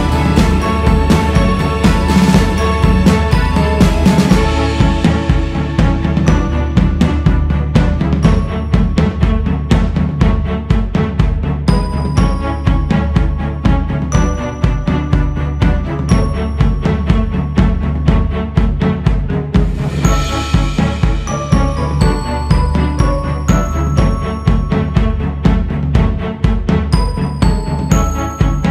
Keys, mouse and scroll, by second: 2.6-13.5 drag, 13.5-15.1 scroll down 7, 15.1 click, 15.7-16.9 scroll up 7, 16.9 shift+s, 17.2 scroll up 1, 17.4 f, 18.6 click, 19.4-21.1 scroll down 9, 21.1 click, 21.9-22.4 scroll up 2, 22.4 click, 22.8-23.4 scroll up 3, 23.8-25.4 drag, 25.4-26.1 scroll down 5, 26.5-27.4 scroll down 2, 27.4 click, 28.1-28.7 scroll up 3.